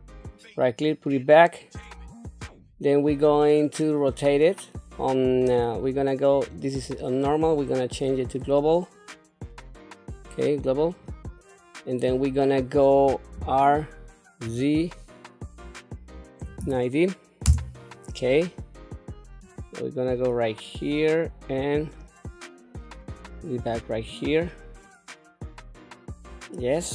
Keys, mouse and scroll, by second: 7.5-10.9 drag, 13.3 r, 19.4-20.9 drag, 21.8-23.2 drag, 23.6-26.8 middle drag.